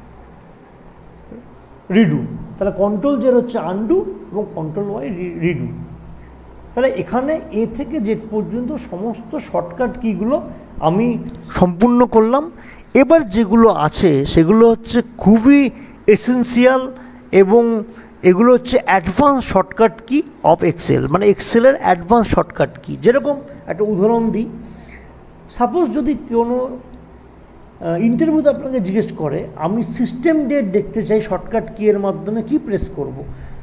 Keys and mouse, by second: 25.2 click.